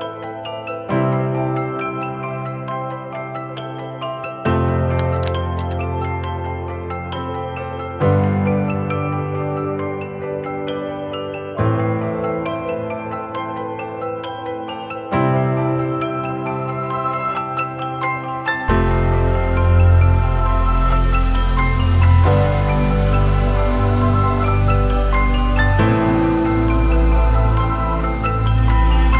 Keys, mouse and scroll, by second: 9.2 ctrl+t, 10.2 alt+shift+click, 16.3 alt+shift+click, 19.9 Down, 20.1 Down, 20.3 Down, 20.4 Right, 21.2 Right, 21.9 Right, 22.6 Down, 23.4 Return, 24.0 Down.